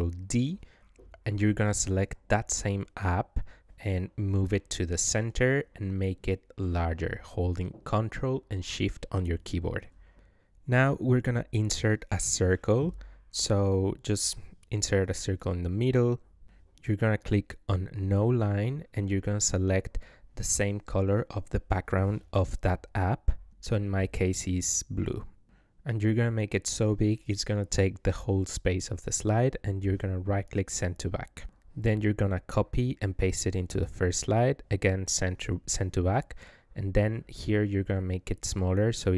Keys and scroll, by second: 29.1 ctrl+c, 31.1 ctrl+v.